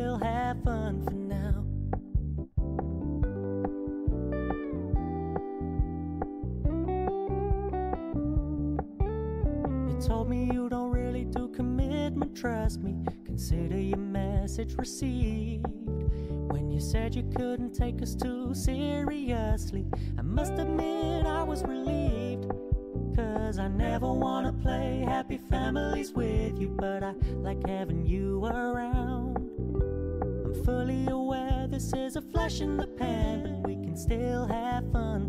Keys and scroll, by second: 3.3 ctrl+t.